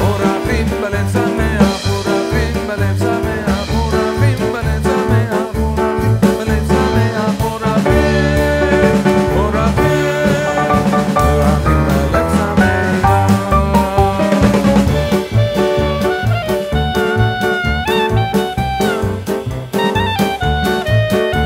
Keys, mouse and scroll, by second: 0.4 click, 0.4 scroll down 1, 1.1 click, 2.4 scroll up 2, 2.6 middle click, 3.2 Tab, 3.6 middle click, 4.4 a, 5.3 scroll down 2, 5.5 middle click, 6.7 middle click, 7.2 e, 8.2 middle click, 8.9 middle click, 10.0 click, 10.4 middle click, 11.9 m, 12.6 Tab, 13.0 middle click, 15.8 alt+z, 16.2 middle click, 18.6 Tab, 19.0 middle click, 19.8 alt+z, 20.2 click, 20.7 click.